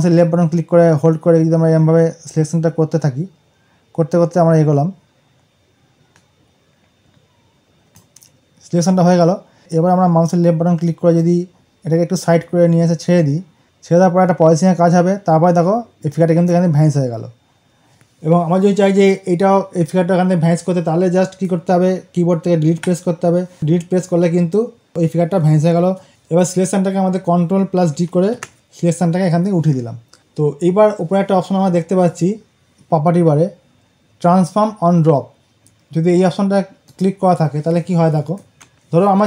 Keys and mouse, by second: 11.4-15.6 drag, 26.0 ctrl+z, 36.7 click, 38.6 ctrl+alt+z.